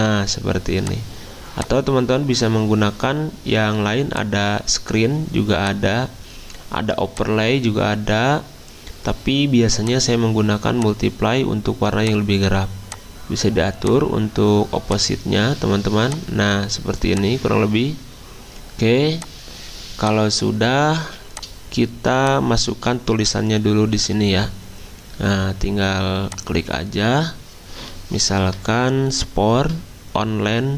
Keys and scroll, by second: 21.0 z, 22.1 t.